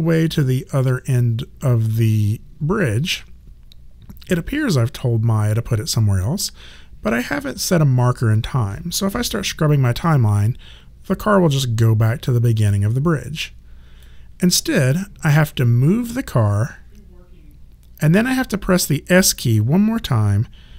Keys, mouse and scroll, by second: 9.9 click, 15.6 click.